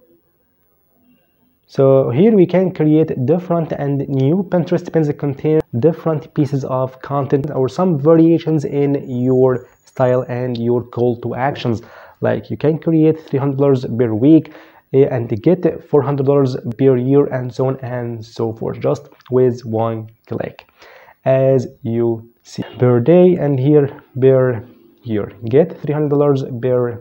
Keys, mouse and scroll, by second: 22.6 click.